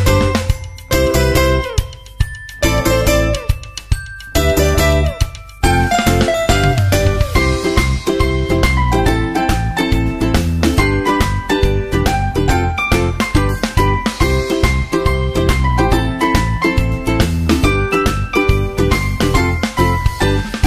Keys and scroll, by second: 6.2 super+Right.